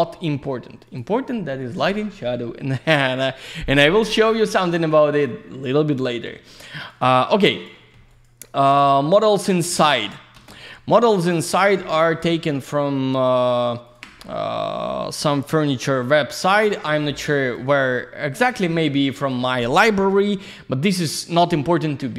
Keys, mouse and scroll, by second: 0.9 click, 1.0 click, 4.4 click, 4.5 click, 5.0 click, 5.1 click, 5.9 alt+middle click, 6.5 click, 7.0 alt+middle click, 7.5 click, 7.6 click, 7.7 middle click, 7.9 double middle click, 8.1 click, 8.7 ctrl+space, 9.2 click, 9.7 click, 11.0 q, 11.4 click, 11.8 alt+middle click, 12.5 click, 13.8 ctrl+click, 13.9 ctrl+click, 14.2 alt+middle click, 15.3 middle click, 15.8 alt+z, 15.9 click, 17.0 ctrl+click, 17.1 ctrl+click, 17.4 ctrl+click, 17.5 ctrl+double click, 18.0 alt+middle click, 18.4 alt+z, 18.5 click, 20.0 alt+middle click.